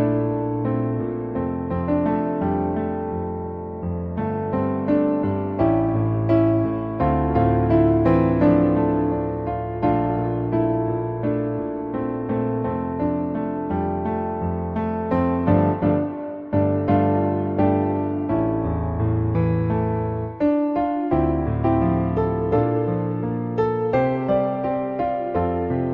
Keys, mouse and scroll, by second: 3.5 shift+middle click, 3.8 middle click, 4.9 shift+middle click, 5.2 middle click, 10.2-13.7 drag, 14.5-16.7 middle drag, 19.3-20.9 drag, 22.0 middle click, 23.7-25.5 drag.